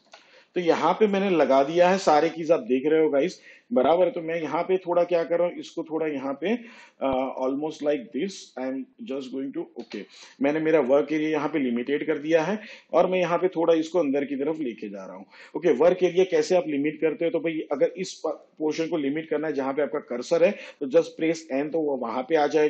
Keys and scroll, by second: 0.7 shift+Page_Down, 2.6 ctrl+v, 12.4 n.